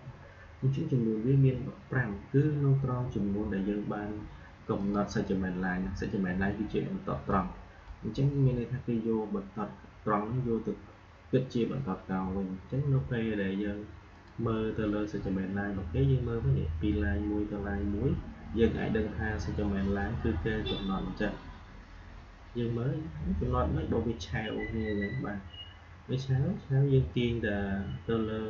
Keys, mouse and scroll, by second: 4.7 click, 7.2-10.1 drag, 14.0 click, 27.0-28.4 drag.